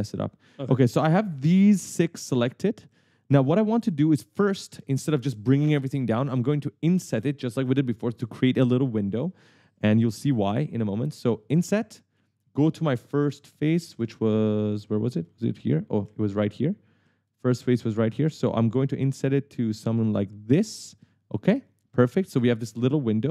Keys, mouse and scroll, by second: 0.0-4.3 typing, 1.1-1.5 scroll up 1, 9.2-10.0 typing, 9.4 right click, 11.7 click, 12.3 right click, 13.4 right click, 13.9 d, 15.4 w, 15.9 w, 16.5 right click, 16.5 w, 18.1-19.3 typing, 21.6 click, 21.9-23.3 typing.